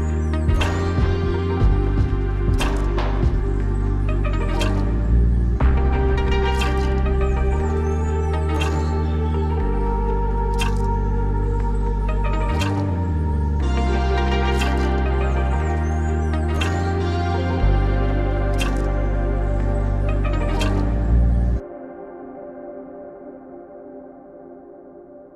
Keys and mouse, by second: 0.1 click, 0.2-1.3 drag, 1.3 [, 1.4 click, 1.7 ctrl+z, 1.9 [, 2.1 [, 2.5 ctrl+z, 2.5 ], 2.6 click, 4.3 click, 4.7 ctrl+z, 4.8 [, 4.9 click, 5.4 ctrl+z, 5.4 [, 5.5 click, 6.7 ctrl+z, 13.1 click, 13.9 click.